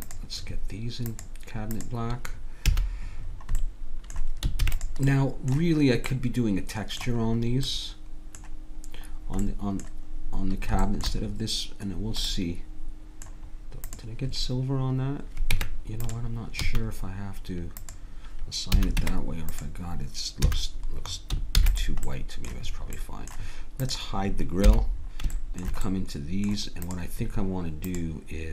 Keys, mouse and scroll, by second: 0.1-2.9 drag, 2.7 a, 4.6 ctrl+s, 13.9-15.5 drag, 15.5 Tab, 16.7 a, 17.8-19.6 drag, 18.7 a, 19.0 Tab, 20.5 a, 21.5 ctrl+s, 23.8 click, 24.7 h.